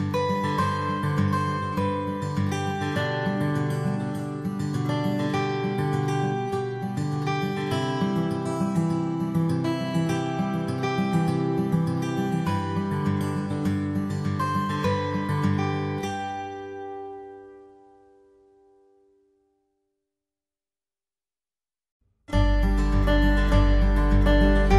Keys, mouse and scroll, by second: 7.3 alt+w, 14.1 middle click, 21.9 alt+w, 22.7 alt+middle click.